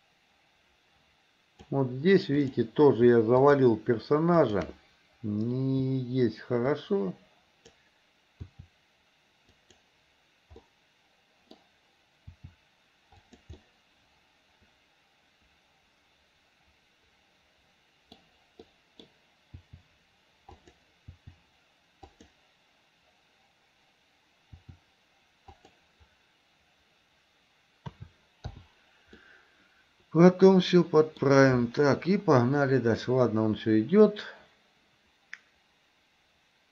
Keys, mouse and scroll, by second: 2.5 click, 3.5 shift+click, 4.5 shift+click, 6.9-7.9 drag, 8.4 r, 10.7 middle click, 12.4 r, 13.6-18.2 middle drag, 18.7 middle click, 19.6 r, 21.2 r, 24.6 r, 28.0 a, 28.6 i, 29.3-31.3 middle drag, 32.7-36.7 drag.